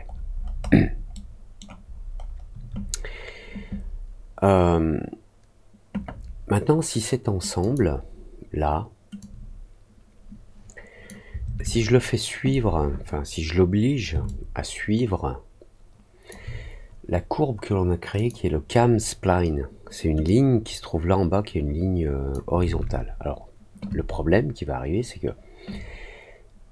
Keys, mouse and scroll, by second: 0.6 alt+scroll down 1, 1.1 alt+middle click, 1.8-2.3 alt+scroll down 2, 7.5 click, 9.1-11.0 drag, 14.2-16.2 alt+drag, 18.1 click, 20.2-22.2 drag.